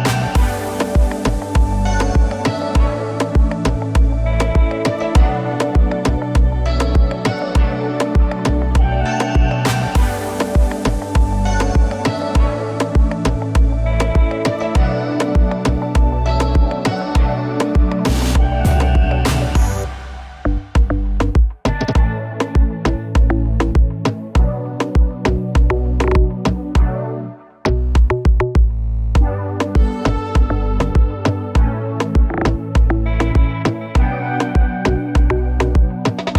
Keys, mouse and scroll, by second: 0.9 space, 3.3 click, 3.6 right click, 6.4 click, 8.5-9.4 typing, 9.6-11.4 drag, 12.9 ctrl+space, 13.3 f, 14.5-18.6 drag, 22.0 ctrl+space, 22.8-24.0 typing, 24.2 click, 26.8-30.8 drag, 33.8 ctrl+space, 34.3-35.9 typing, 35.4 click.